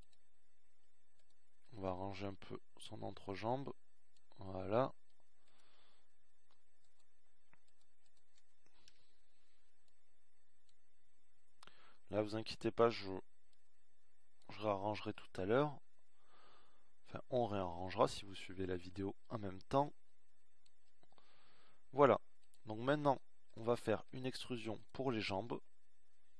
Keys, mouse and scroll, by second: 5.2-7.2 middle drag, 7.5 middle click, 13.0 KP_1, 24.1-25.2 middle drag.